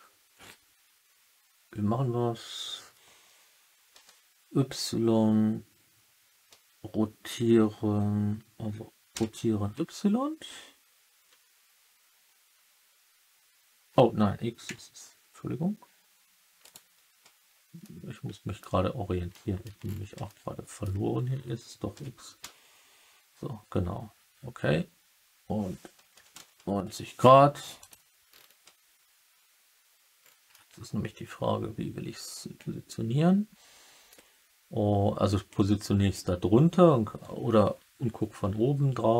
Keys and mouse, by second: 3.9 r, 9.1 y, 14.6 x, 16.6 right drag, 17.7-18.5 alt+middle drag, 19.2-19.6 alt+middle drag, 20.2 alt+middle click, 21.9 r, 22.3 x, 26.0 9, 26.3 0, 27.7 click, 30.4-34.0 alt+middle drag.